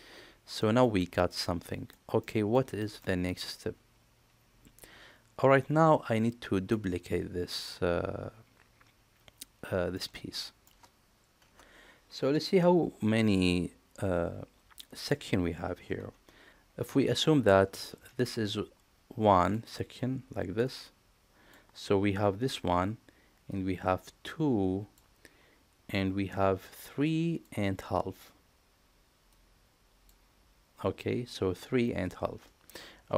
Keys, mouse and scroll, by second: 0.6 middle click, 1.7 middle click, 2.2-2.5 middle drag, 2.8 shift+middle click, 3.3-6.7 middle drag, 9.9 middle click.